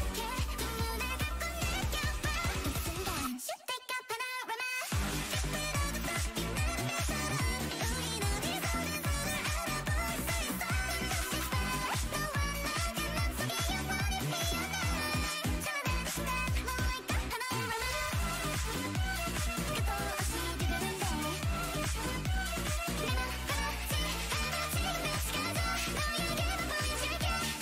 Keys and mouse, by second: 0.0 ctrl+i, 0.1 ctrl+i, 1.1 ctrl+i, 2.6 click, 3.0 a, 3.3-4.5 drag, 4.2 a, 5.5 l, 7.5 r, 9.1 r, 9.8 g, 10.9 a, 11.2 l, 11.7 r, 14.3 g, 16.1 t, 16.7 click, 17.6-18.8 drag, 19.1-20.9 drag, 20.3 Tab, 21.0-22.1 middle drag.